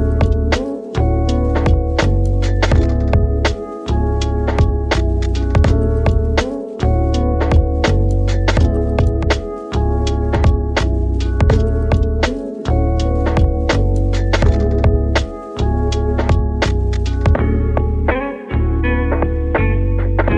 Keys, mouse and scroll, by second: 0.0 t, 2.7 KP_1, 2.7 1, 3.8 scroll up 1, 3.9-6.2 shift+middle drag, 6.2 r, 6.5 x, 7.2 9, 7.5 Return, 9.1 g, 10.5 click, 10.8-12.1 scroll up 2, 12.1-12.8 scroll up 1, 12.8 scroll up 4, 12.8 g, 13.0 y, 13.9 click, 14.7 g, 14.7 g, 15.0 y, 15.2 click, 17.3-20.0 drag.